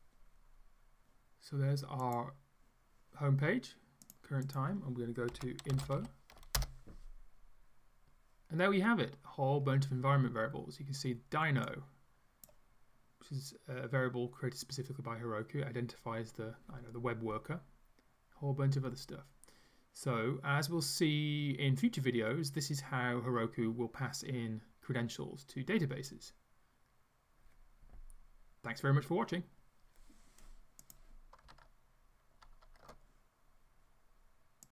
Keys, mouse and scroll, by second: 2.3 click, 4.1 click, 4.5 click, 5.1-6.4 typing, 6.6 Return, 11.7-15.4 drag, 17.8-18.4 scroll down 1, 18.7-19.2 scroll down 1.